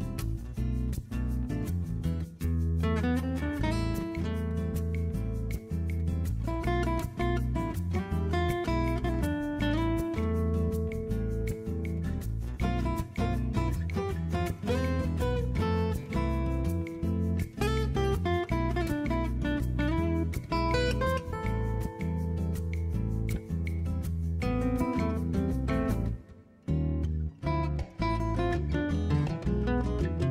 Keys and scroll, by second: 6.9 super+z, 10.5-11.5 typing, 13.3 v, 16.1 b.